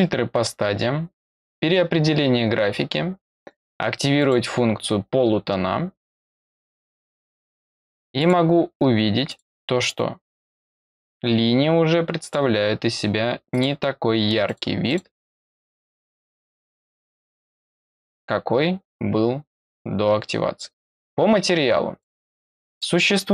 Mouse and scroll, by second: 4.1 click, 6.1 click, 6.8 click, 7.2 click, 8.1 click, 9.2 click, 10.0 middle click, 10.0 scroll down 2, 10.3 middle click, 10.3 scroll up 2, 12.2 click, 13.5 click, 14.4 click, 14.8 click, 15.5 click, 15.8 click, 16.4 click, 16.8 click, 17.7 click, 21.9 click, 22.6 click.